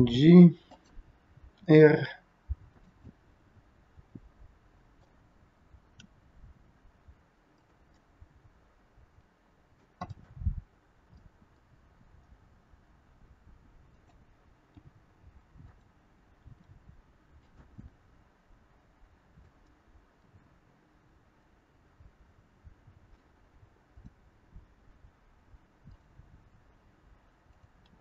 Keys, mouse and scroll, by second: 1.6 r, 3.2 middle click, 6.0 r, 8.1 middle click, 8.1 scroll up 1, 10.1 middle click, 10.6-11.1 scroll down 3, 11.1 middle click, 12.0 r, 14.7 g, 16.3 r, 17.8 middle click, 27.5 click.